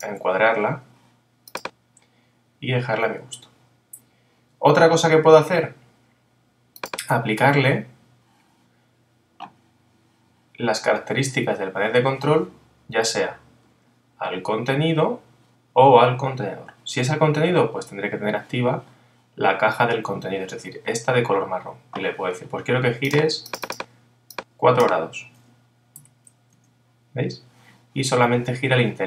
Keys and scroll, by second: 26.5 Return.